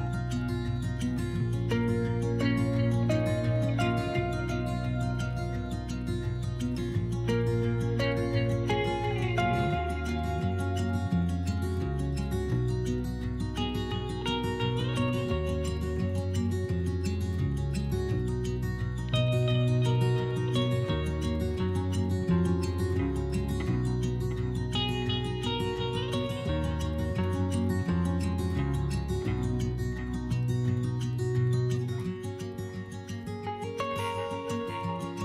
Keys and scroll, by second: 6.5 3, 7.4 s, 9.7 s, 15.2 s, 21.1 s, 29.1 2, 32.9 2, 33.9 s.